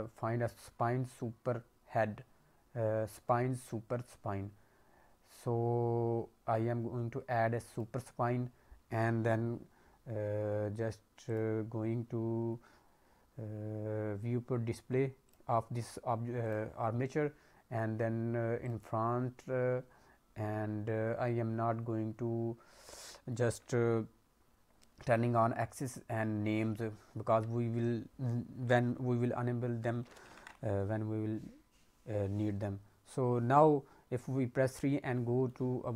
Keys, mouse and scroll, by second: 3.1 click, 7.7 click, 11.2 click, 15.2 click, 16.4 click, 17.2-17.8 scroll down 3, 18.6 click, 27.2 a, 32.7 KP_3, 35.0 middle click, 35.6-35.9 scroll down 3.